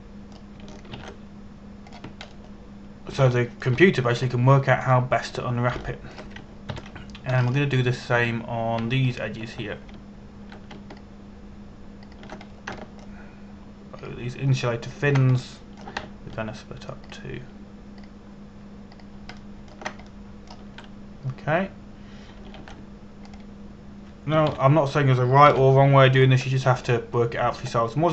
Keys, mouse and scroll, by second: 0.0 alt+shift+middle click, 0.7 shift+middle click, 2.6 ctrl+e, 3.6 click, 4.0-4.9 scroll down 1, 5.0 shift+middle click, 5.9-6.6 scroll up 1, 6.6 middle click, 7.5 shift+middle click, 8.4 ctrl+KP_1, 9.0 scroll up 1, 9.9 a, 10.8 alt+right click, 12.5 alt+shift+right click, 13.7 alt+shift+right click, 14.1 scroll down 1, 14.5 alt+shift+middle click, 15.6 alt+shift+right click, 16.5 alt+shift+right click, 17.1 shift+middle click, 18.7 alt+shift+right click, 19.6 alt+shift+right click, 20.6 alt+shift+right click, 21.0 alt+shift+middle click, 21.7 shift+middle click, 24.3 ctrl+e, 24.9 click, 26.2 ctrl+KP_1, 27.2 KP_7.